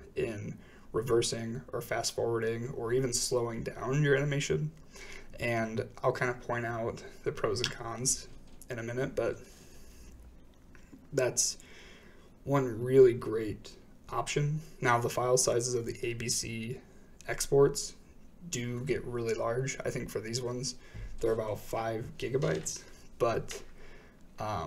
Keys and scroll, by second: 7.8-8.2 typing, 8.2 Return, 13.7 space, 21.7 space, 22.4 shift+Right.